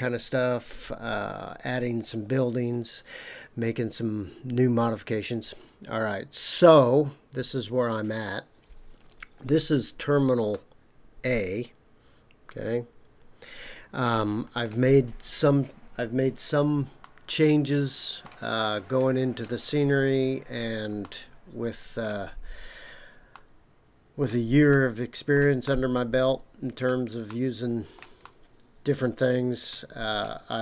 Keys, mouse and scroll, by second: 9.0-9.8 scroll down 5, 10.5-14.7 middle drag, 17.0-18.2 shift+middle drag, 18.8-19.4 scroll up 3, 21.0-22.0 middle drag, 22.3-23.3 scroll up 2, 23.3 middle click, 24.7-25.4 shift+middle drag, 25.6-26.8 middle drag, 27.2-28.0 shift+middle drag, 28.2-30.1 middle drag.